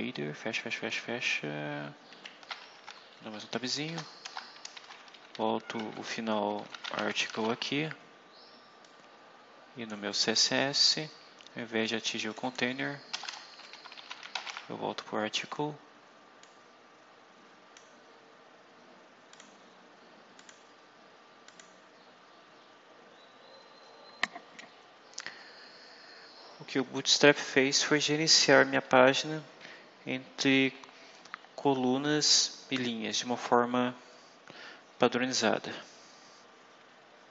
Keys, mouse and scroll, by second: 1.5 shift+Up, 2.2 shift+End, 2.7 shift+Tab, 3.4 Right, 3.8 Return, 4.2-7.8 typing, 8.7-10.0 drag, 10.2-10.9 scroll down 4, 12.2 click, 13.0-14.9 typing, 16.3-17.9 drag, 19.3 click, 20.3 click, 21.4 click, 25.1-26.8 scroll down 8, 27.5-28.8 scroll up 8.